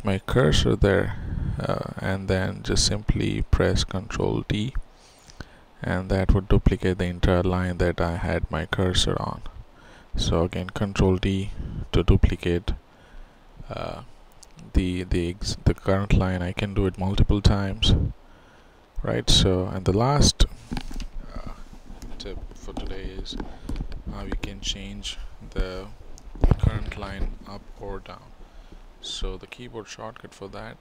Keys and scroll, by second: 3.2 ctrl+d, 6.7 ctrl+d, 6.8 ctrl+z, 10.5 ctrl+z, 11.1 ctrl+d, 14.6 ctrl+d, 14.7 ctrl+z, 15.7 ctrl+z.